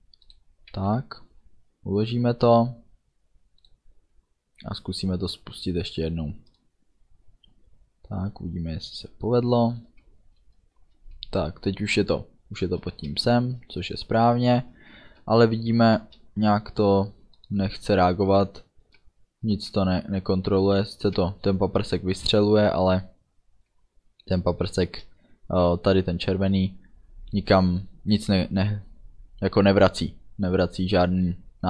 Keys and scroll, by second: 0.8 ctrl+s, 10.9 space, 12.9 space, 18.6 space, 24.4 space.